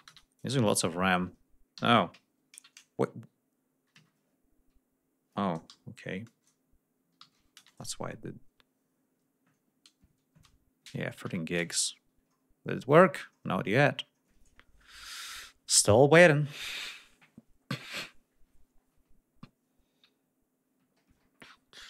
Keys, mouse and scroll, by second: 0.0 Return, 3.8 Escape, 6.2 BackSpace, 7.5 Return, 11.2 F1, 12.3-12.8 ctrl+scroll down 2.